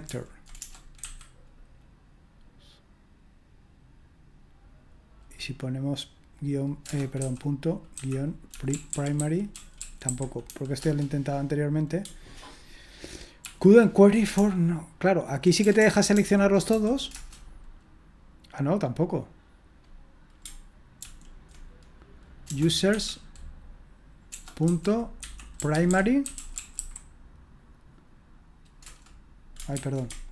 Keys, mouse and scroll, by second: 0.1 ctrl+p, 0.6-2.7 typing, 6.9-10.9 typing, 13.4 ctrl+p, 14.4-16.7 typing, 17.1 Return, 21.0 ctrl+p, 22.5-22.9 typing, 24.3-27.2 typing, 28.8 Return, 29.8 ctrl+c.